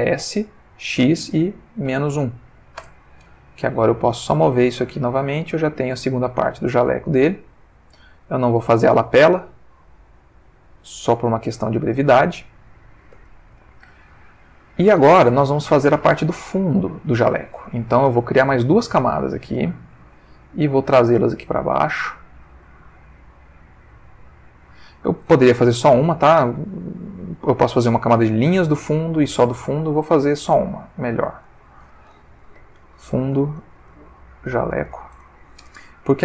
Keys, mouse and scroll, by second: 0.2 s, 0.8 x, 1.9 -, 2.1 1, 2.8 Return, 4.1-8.9 drag, 9.4 click, 13.1 Tab, 13.8-15.6 ctrl+middle drag, 19.4 click, 19.8 click, 21.3 click, 22.5 click, 24.0 click, 29.9 click, 30.8 click, 31.4 click, 32.6-34.9 typing, 35.1 Return.